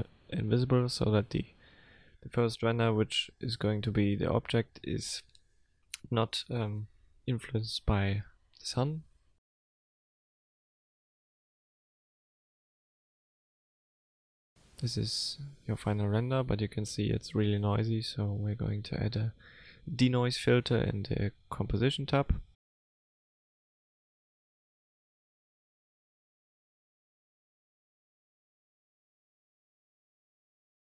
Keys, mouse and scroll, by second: 1.5 click, 2.9 click, 3.2 click, 3.9 KP_0, 5.0 click, 5.2 click, 7.2 F12.